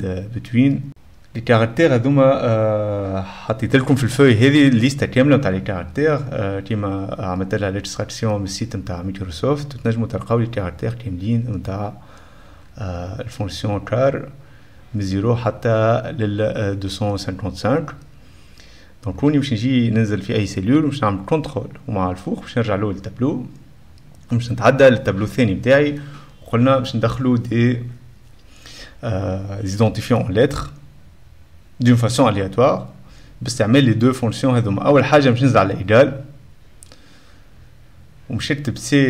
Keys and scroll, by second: 21.5 ctrl+x, 21.6 ctrl+l, 21.6 ctrl+', 21.7 ctrl+Return, 22.3 Up, 35.4 BackSpace, 35.6 =, 36.0 =, 37.3-39.0 typing.